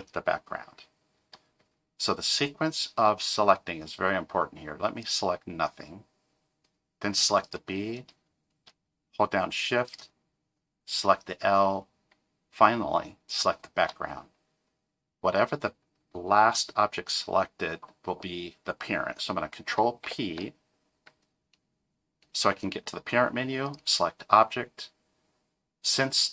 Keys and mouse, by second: 20.0 ctrl+p.